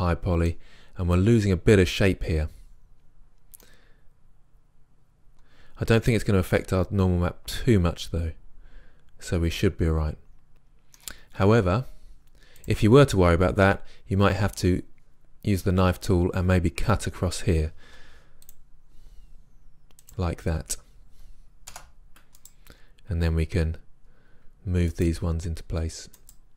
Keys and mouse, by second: 4.9 middle click, 12.7-14.9 drag, 14.9-21.2 middle drag, 18.0 k, 22.4-24.3 drag, 25.0 right click, 25.3 g.